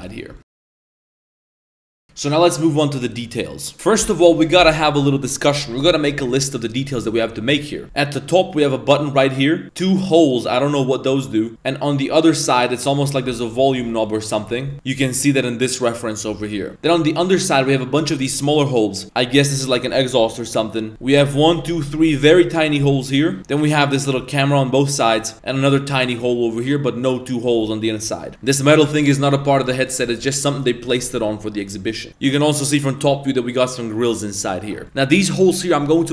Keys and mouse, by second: 0.0 middle drag, 0.3 shift+middle click, 13.2 middle click, 13.6 shift+middle drag, 14.0 middle click.